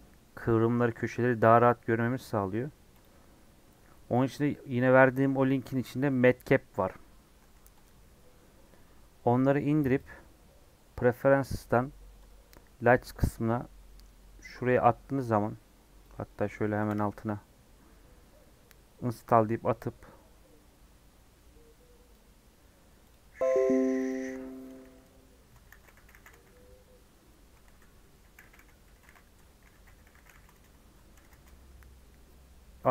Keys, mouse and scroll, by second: 9.9-16.4 drag.